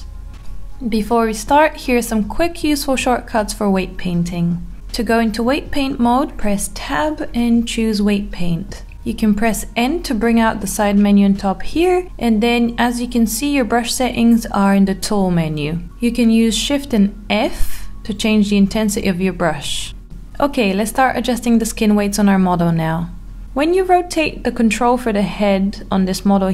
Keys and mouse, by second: 1.3-2.6 middle drag, 4.8 Tab, 5.2 Tab, 9.5 n, 14.1 click, 15.8 click, 16.1 shift+f, 20.6 click, 21.4 r, 25.9 Escape.